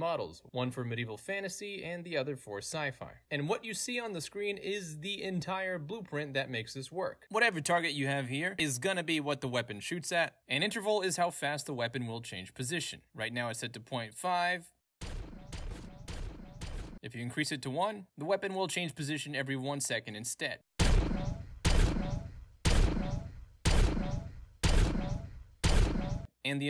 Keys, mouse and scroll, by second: 0.0 alt+click, 0.3 alt+right click, 0.8-1.8 alt+drag, 1.8 alt+right click, 1.9-3.2 alt+drag, 6.5 click, 7.3 alt+right click, 7.6 click, 8.2 click, 8.7-10.3 right drag, 10.3 click, 10.8 click, 12.7 click, 13.4 1, 13.9 Return, 14.8 click, 15.1-16.9 right drag, 16.9 click, 17.7 click, 18.1 1, 18.4 Return, 19.5 click, 20.8-26.2 right drag, 26.2 click.